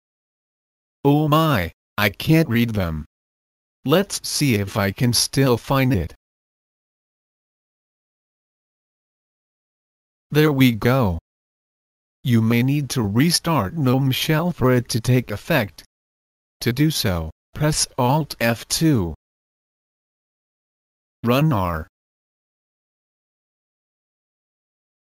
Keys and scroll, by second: 18.2 alt+F2, 20.9 typing, 24.2 Return.